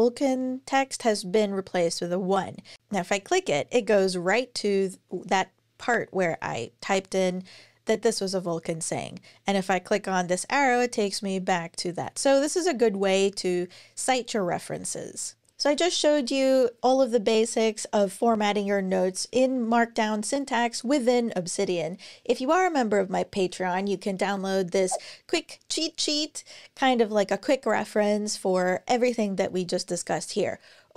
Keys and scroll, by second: 15.3 super+e.